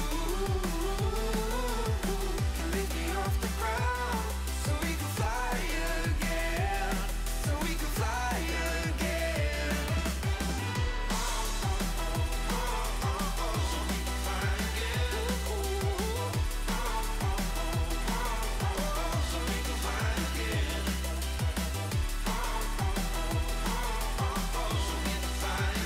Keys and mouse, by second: 0.2 click, 1.7 click, 2.6 click, 3.5 click, 4.2 click, 5.3 Return, 6.2 click, 7.6 click, 8.7 Delete, 11.1 click, 11.6 click, 11.8 click, 13.8 click, 20.3 click, 21.4 click, 22.4 click, 23.8 click.